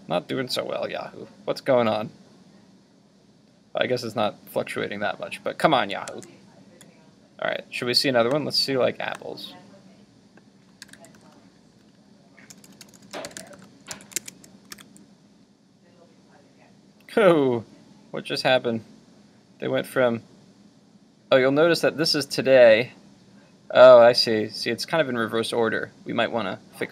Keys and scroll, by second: 6.1 super+Tab, 13.9 super+s, 14.3 super+Tab, 14.8 super+r.